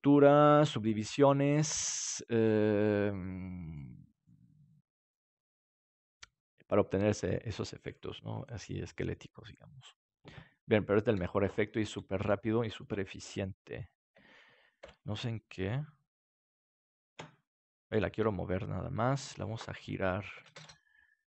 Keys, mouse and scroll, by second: 11.0 KP_7, 11.8-12.3 scroll up 1, 12.3-12.7 scroll down 1, 14.1 d, 14.8 Escape, 18.1 g, 19.1-21.3 drag.